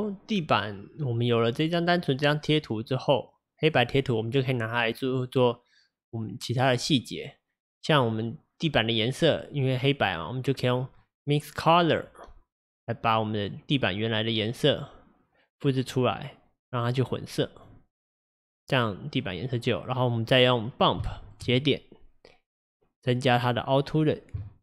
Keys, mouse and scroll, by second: 3.7 click, 7.7-8.8 drag, 8.8-14.9 middle drag, 14.9 click, 16.6-17.7 drag, 23.5 middle click, 24.0 scroll up 3, 24.4-24.6 shift+middle drag.